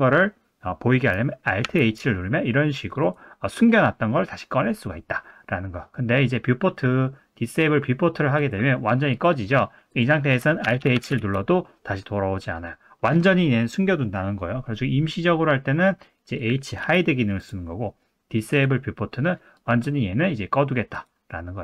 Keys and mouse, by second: 1.6 alt+h, 8.4 click, 10.6 alt+h, 10.8 alt+h, 11.1 alt+h, 15.7 click, 16.4 click, 16.8 h, 18.5 click, 19.6 click, 20.9 click.